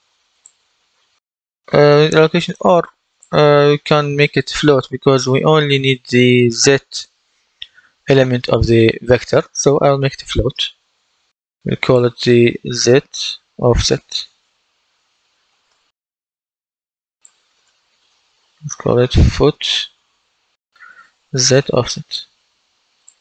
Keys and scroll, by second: 12.6 shift+z, 14.2-16.1 typing, 17.5 space, 18.3 Left, 19.2-20.6 typing, 21.3 Return.